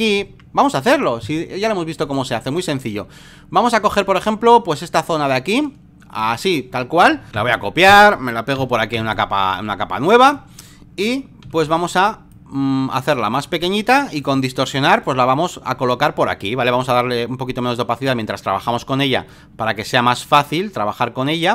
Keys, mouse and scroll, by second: 2.0-4.1 drag, 4.2-7.2 drag, 7.3 ctrl+c, 7.9 click, 8.6 ctrl+v, 9.1-10.6 drag, 11.4 ctrl+t, 12.3-14.3 drag, 14.7-15.7 ctrl+drag, 16.8-18.6 drag, 19.3-21.5 ctrl+drag.